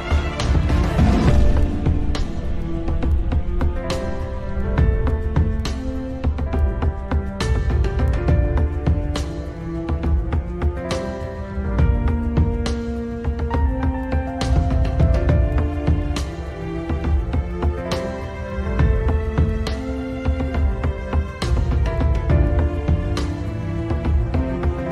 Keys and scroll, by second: 2.6 ctrl+z, 8.1 F3, 9.0 shift+F2, 9.3 Escape, 14.7 shift+Page_Down, 15.3 w, 19.3 d.